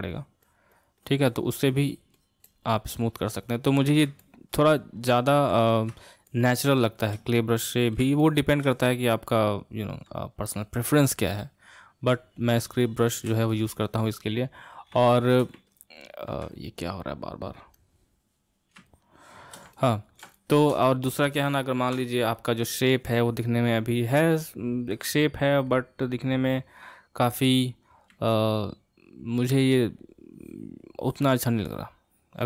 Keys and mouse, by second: 4.2-11.8 middle drag, 12.6-16.5 shift+middle drag, 17.8-18.9 drag, 18.9-25.6 shift+middle drag, 25.7-31.3 middle drag.